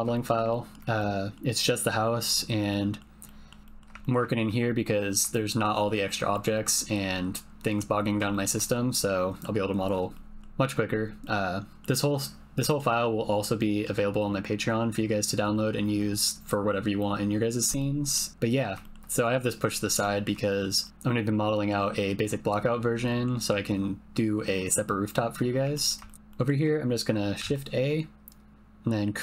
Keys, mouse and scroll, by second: 0.2 shift+click, 0.5 ctrl+click, 1.0 click, 2.7 click, 3.2 click, 3.6 shift+click, 4.0 ctrl+middle click, 4.3 shift+middle click, 4.7 middle click, 5.3 shift+click, 5.9 click, 6.5 click, 7.5 middle click, 8.3 shift+middle click, 8.6 middle click, 10.1 click, 11.2 click, 12.7 shift+click, 13.6 click, 17.8 click, 18.8 shift+middle click, 20.0 middle click, 20.4 shift+middle click, 20.8 middle click, 21.4 middle click, 23.0 middle click, 25.7 ctrl+middle click, 26.0 shift+middle click, 26.2 click, 27.4 shift+a.